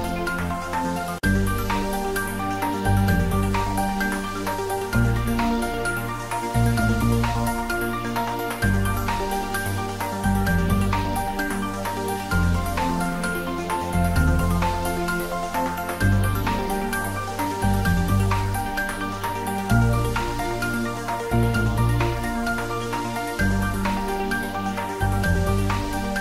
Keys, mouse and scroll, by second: 1.0 click, 1.8 ctrl+z, 3.2-6.8 drag, 7.7 shift+click, 7.8 shift+click, 8.3-10.0 typing, 10.5 click, 11.1 middle click, 12.0 shift+z, 12.7 middle click, 13.3-15.7 typing, 15.1 click, 17.0 click, 17.6 ctrl+z, 19.2 Tab, 20.3-22.8 middle drag, 22.8 click, 23.1 ctrl+s, 23.4 ctrl+middle click, 24.4 ctrl+middle click, 24.8 ctrl+s.